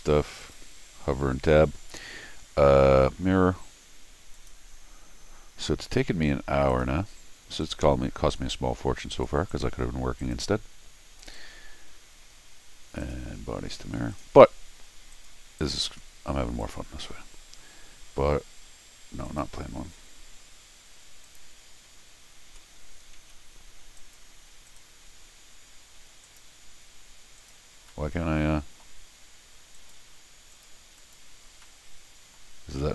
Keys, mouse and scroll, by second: 0.4 click, 4.3 click, 6.7 click, 7.6 click, 9.1 click, 9.5 click, 10.2 click, 11.2 click, 13.0 click, 14.1 click, 15.1 click, 15.6 click, 16.6 click, 19.2 click, 21.2 click, 24.0 click, 24.7 click, 26.2 click, 27.4 click, 27.9 middle click, 28.7 middle click, 29.7 click, 30.5 click, 31.0 click, 31.6 middle click, 32.7 scroll down 1, 32.8 middle click.